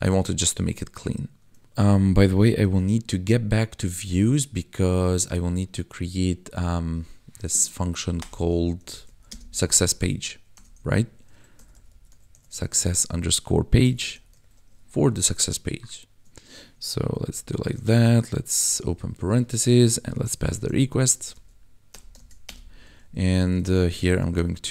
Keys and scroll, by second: 1.6 ctrl+`, 2.5 ctrl+b, 8.1-10.5 typing, 11.5 u, 12.3 s, 12.8 shift+-, 13.8-14.6 typing, 17.1 ctrl+b, 17.9 BackSpace, 18.6 shift+9, 19.9-22.1 typing, 20.9 Right, 22.4 Return, 23.5-24.7 typing.